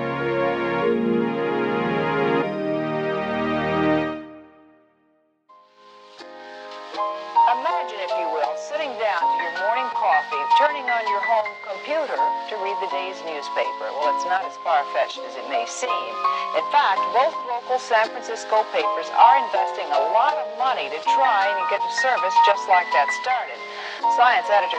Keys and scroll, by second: 1.8 super+z.